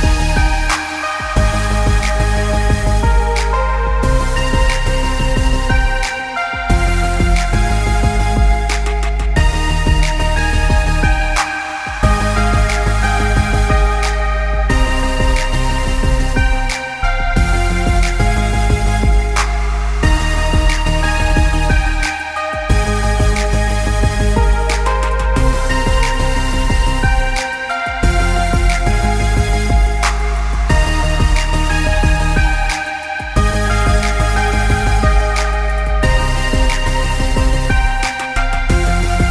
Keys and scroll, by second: 9.9 ctrl+=, 9.9 ctrl+=, 10.1 ctrl+=, 10.2 ctrl+=, 10.4 ctrl+=, 10.5 ctrl+=, 13.3 ctrl+=, 13.4 ctrl+=, 14.7-16.6 typing, 17.9-19.5 typing, 21.2-22.5 typing, 34.3 [, 34.5 [, 34.7 [.